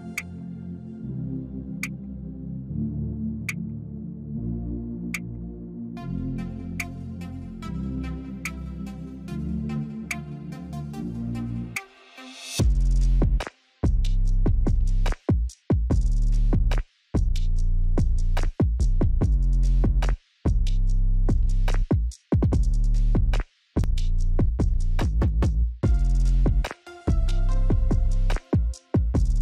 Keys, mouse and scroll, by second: 14.7 right click, 15.9 click, 19.1-21.1 scroll down 1, 21.1 click, 24.4 Delete, 27.5-29.0 scroll up 1, 29.0 click.